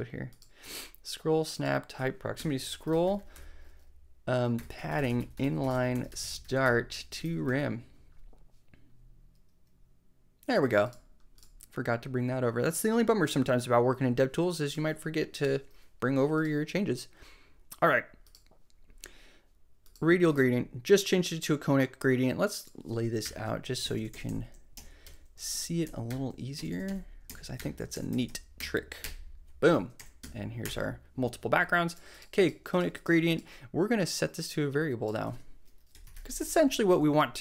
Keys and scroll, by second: 2.3 Return, 2.4-7.7 typing, 23.2 Return, 23.7 alt+Return, 23.8 alt+Right, 24.7 alt+Left, 25.0 alt+shift+Return, 25.3 alt+shift+Right, 26.1 Return, 27.2 alt+Left, 27.5 alt+Return, 27.9 super+Right, 28.1 super+Left, 28.5 Return, 29.0 BackSpace, 29.9 Right, 30.2 Return, 30.6 BackSpace, 35.2 super+x, 35.9-36.9 typing, 36.9 shift+Left.